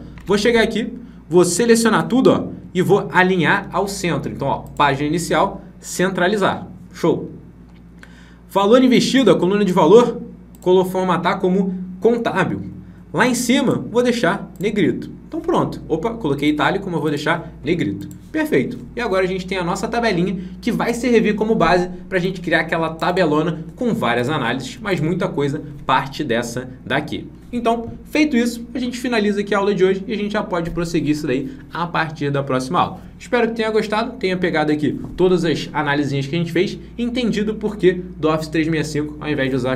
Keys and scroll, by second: 0.1 alt+Tab.